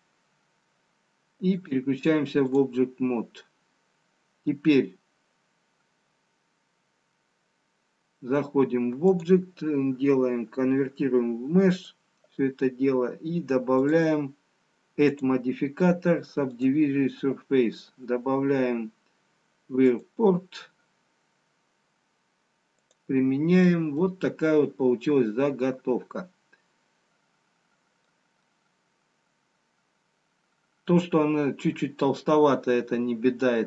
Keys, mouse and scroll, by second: 1.6 click, 3.7-4.6 scroll down 1, 9.3 click, 13.8 click, 15.1 click, 20.0 click, 22.9 click, 24.0 middle click, 30.9 middle click.